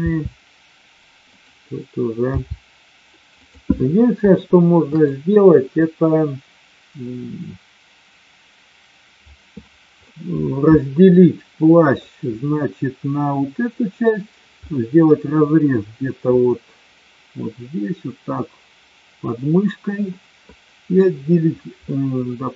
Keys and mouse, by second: 2.3 g, 4.3-5.1 shift+middle drag, 10.1-11.9 middle drag, 14.7-15.1 middle drag, 20.1-20.9 middle drag, 21.8-22.5 middle drag.